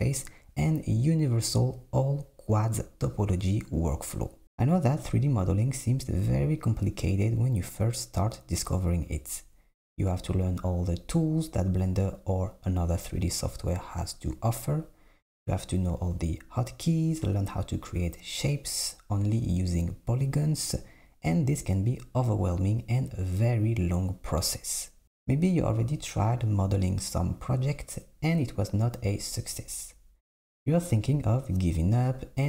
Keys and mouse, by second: 0.1 click, 3.3 click, 3.6 click, 3.8 click, 5.8 shift+click, 6.1 shift+click, 7.1 KP_7, 8.1 g, 10.4 click, 10.7 Tab, 10.8 Tab, 11.5 click, 13.7 ctrl+r, 15.8 ctrl+b, 19.4 click, 19.9 alt+z, 20.4 s, 22.6 s, 24.1 Tab, 24.5 s, 25.2 alt+z, 26.8 Tab, 28.5 ctrl+r, 31.0 ctrl+r.